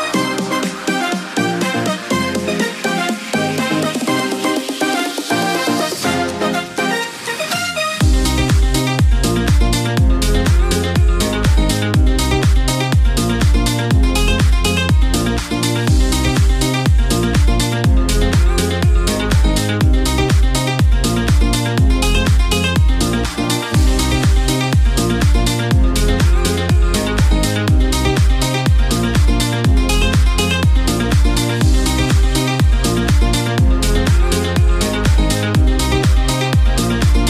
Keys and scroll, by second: 6.5 ctrl+z.